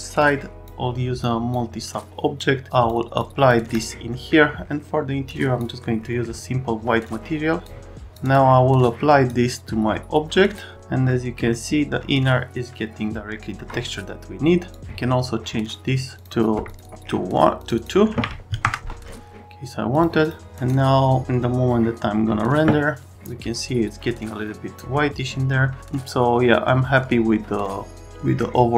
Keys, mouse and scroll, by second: 1.2 click, 2.3 click, 3.2 click, 3.7 click, 4.1 scroll down 1, 5.2 click, 6.0 right click, 7.0 click, 8.1 click, 8.3 click, 8.8 click, 11.1 right click, 11.5-13.6 alt+middle drag, 14.7 click, 16.2 click, 16.7 ctrl+click, 16.8 ctrl+click, 17.6 click, 17.8 click, 18.1 2, 18.6 KP_Enter, 19.9 click, 20.2 click.